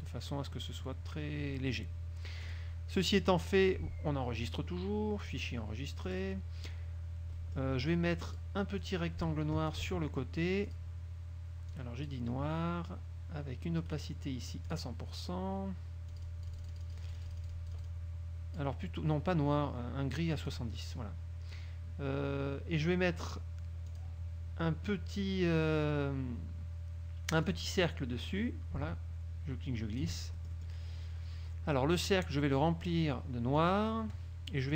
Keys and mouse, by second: 2.6 click, 3.2 click, 5.4 click, 6.2 click, 7.5 click, 8.4 click, 9.0 click, 10.8 click, 11.8 click, 14.0 right click, 14.8 click, 16.2-18.9 drag, 20.5 click, 24.0 click, 27.6 click, 28.4-30.3 drag, 30.4 ctrl+middle click, 33.7 click.